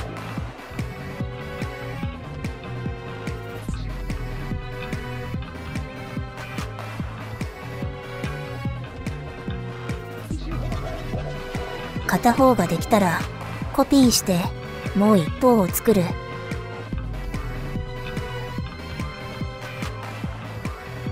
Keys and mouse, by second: 0.5 F2, 1.9 click, 2.0 F2, 3.6 middle click, 4.2 middle click, 4.3 click, 4.9 middle click, 5.1 middle click, 5.4 middle click, 5.6 middle click, 5.7 click, 5.9 middle click, 6.0 click, 6.1 middle click, 6.5 click, 6.6 middle click, 7.4 middle click, 7.6 ctrl+z, 7.6 middle click, 7.9 middle click, 8.2 click, 8.4 ctrl+z, 8.7 click, 8.9 click, 9.3 click, 9.5 click, 9.9 middle click, 10.0 click, 10.1 ctrl+z, 10.2 click, 10.3 middle click, 10.4 click, 10.5 middle click, 10.7 click, 10.9 middle click, 11.1 click, 13.5 click, 14.3 click, 16.1 click, 18.5 shift+d.